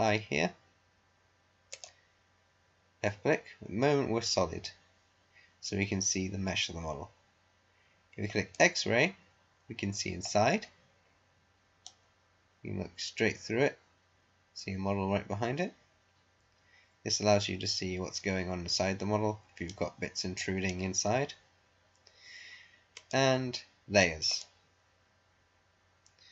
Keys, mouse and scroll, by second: 1.7 click, 8.5 click, 9.5 scroll up 1, 11.0-11.5 scroll down 1, 11.8-20.3 right drag, 21.4 scroll down 1, 23.3 click, 26.0 scroll down 1.